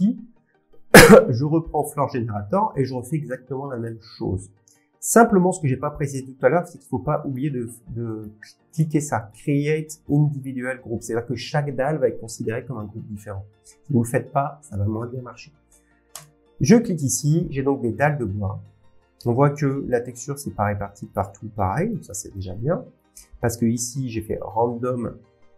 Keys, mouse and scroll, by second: 1.1 click, 6.1 click, 7.4 click, 10.4 click, 16.2 click, 17.7 scroll, 19.2 scroll, 20.7 scroll, 21.6 scroll down 2, 21.9 scroll down 1, 23.0 scroll down 2, 23.9 scroll, 24.2 click.